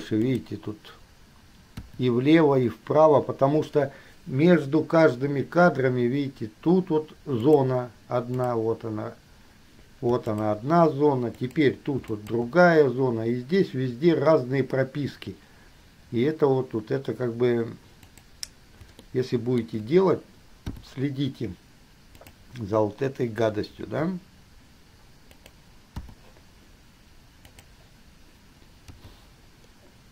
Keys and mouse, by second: 2.0 i, 7.6 click, 8.5 click, 10.5 shift+click, 11.6 drag, 12.2 shift+click, 18.2 click, 19.2-20.0 shift+drag, 20.9 i, 22.5 click, 23.9 g, 26.2 i, 29.2 g.